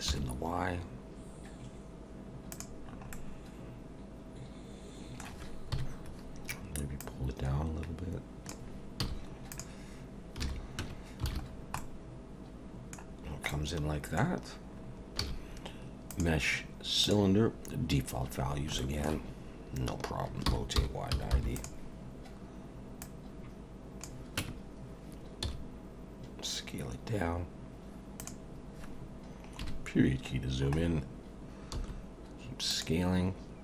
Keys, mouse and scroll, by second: 2.8 scroll down 4, 3.1 middle click, 5.7 KP_1, 7.0 click, 9.0 z, 10.4 alt+a, 10.8 Tab, 11.3 alt+a, 11.4-11.8 scroll down 4, 11.8 middle click, 13.1-13.5 scroll down 1, 13.5 middle click, 14.8 scroll up 2, 15.2 shift+a, 18.4 scroll down 2, 18.8 shift+middle click, 20.4 r, 23.0 click, 24.4 Tab, 25.4 s, 29.6 KP_Decimal, 30.4-31.7 scroll down 3, 31.7 s.